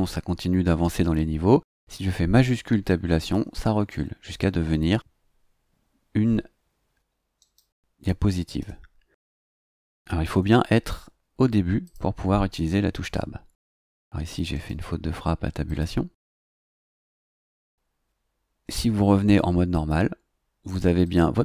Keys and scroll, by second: 3.3 shift+Tab.